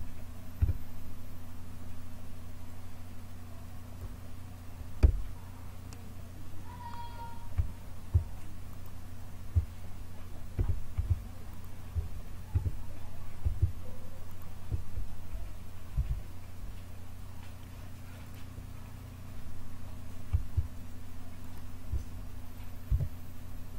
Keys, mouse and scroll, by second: 0.5 a, 2.6 click, 4.9 a, 8.6-10.5 drag, 10.5 a, 11.4-15.7 drag, 12.5 a, 15.9 Delete, 21.3-22.8 drag, 22.8 KP_7.